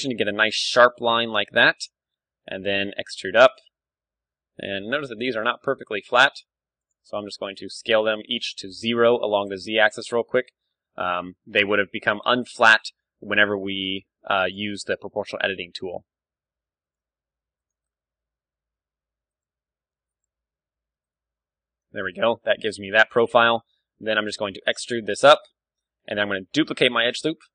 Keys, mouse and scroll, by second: 1.6 Tab, 1.7-3.5 middle drag, 2.4 e, 3.5-5.1 drag, 4.6 ,, 5.0 s, 5.9-7.6 middle drag, 7.1 s, 7.6 right click, 8.8-12.1 right drag, 9.1 s, 10.6 s, 12.6-14.2 right drag, 12.9 s, 14.8-16.2 right drag, 14.8 s, 16.0 g, 16.9-18.7 drag, 17.1 a, 17.7-19.4 right drag, 18.4 s, 19.4-22.0 drag, 19.4 e, 20.3 s, 21.2 Tab, 22.0-24.9 middle drag, 23.6 Tab, 24.0 e, 26.0-27.5 drag, 26.5 shift+d.